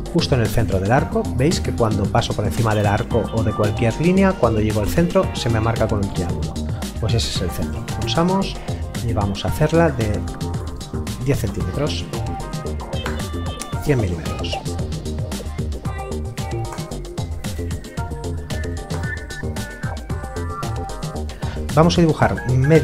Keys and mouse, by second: 7.6 click, 10.2 KP_1, 10.4 KP_0, 13.0 Return, 16.7 Return.